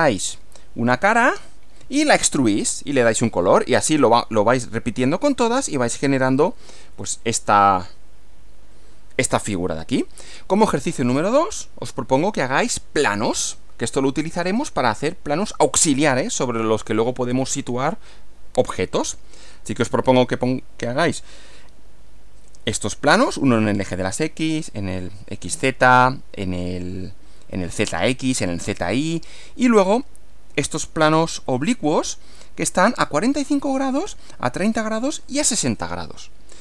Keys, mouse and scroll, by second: 6.4 Left, 10.1 Right, 12.9 scroll down 2, 13.9-14.7 scroll up 4, 31.4 Right.